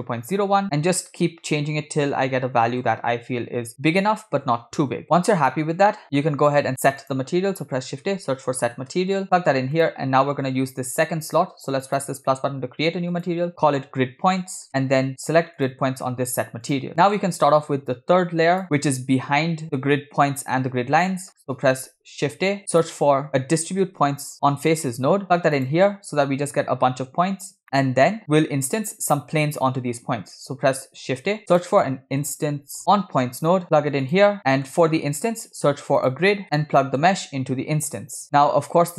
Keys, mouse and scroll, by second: 0.6-2.8 shift+drag, 3.7-5.0 shift+drag, 6.2 middle click, 6.2 scroll down 3, 6.7 shift+a, 11.9-12.4 drag, 13.1-14.7 drag, 15.6-16.9 drag, 16.9 middle click, 16.9 scroll down 1, 17.9 click, 21.4-21.7 scroll up 2, 22.6 shift+a, 27.3 scroll up 2, 28.1 middle click, 30.2 shift+s, 31.2 shift+a, 34.4 click, 34.5 middle click, 35.4 shift+a, 36.8 middle click, 38.0 click.